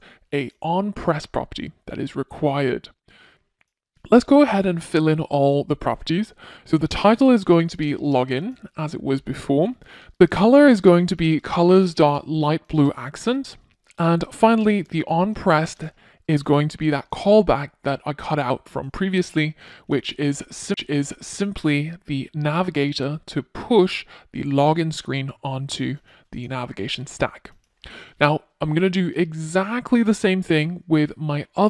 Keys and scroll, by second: 6.3 Return, 13.9 Return, 18.0 Return, 18.5 super+v, 21.0 super+s, 30.6 super+c.